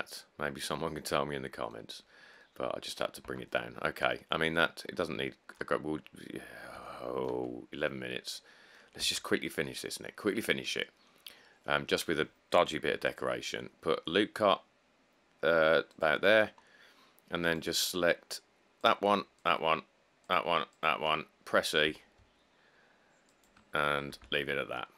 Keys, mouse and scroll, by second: 3.2 middle click, 3.4 Tab, 3.7 middle click, 3.7 middle click, 4.0 middle click, 4.1 middle click, 5.1 middle click, 5.1 middle click, 5.2 middle click, 6.1 middle click, 6.2 middle click, 6.3 middle click, 9.3 Tab, 10.0 middle click, 10.1 middle click, 11.4 scroll down 2, 12.9 ctrl+r, 22.1 e, 24.4 Tab, 24.8 middle click, 24.8 middle click.